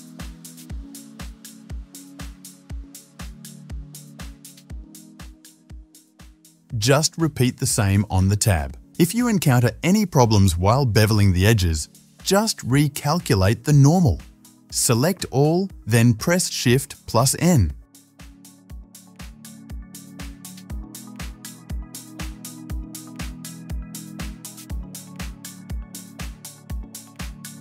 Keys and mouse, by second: 2.4 Tab, 3.4 right click, 3.4-4.1 middle drag, 4.1-5.2 right drag, 5.2-5.6 drag, 5.6-8.9 middle drag, 7.8 Tab, 8.9 click, 9.0-15.0 shift+middle drag, 9.7 ctrl+b, 14.6 a, 16.5 shift+n, 17.1 click, 17.3 alt+shift+click, 17.6 alt+shift+click, 18.7 ctrl+b, 22.1 ctrl+b, 22.2-24.3 shift+middle drag, 24.3 alt+shift+click, 24.4 middle click, 24.5-27.6 drag, 26.8 Tab.